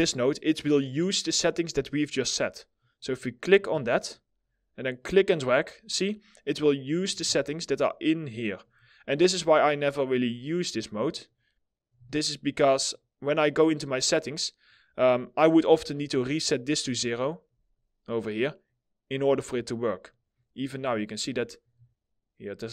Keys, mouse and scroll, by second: 2.5 middle click, 6.8 w, 10.8 right click, 11.4 w, 15.5 right click, 19.6 middle click, 20.5-22.7 scroll down 1.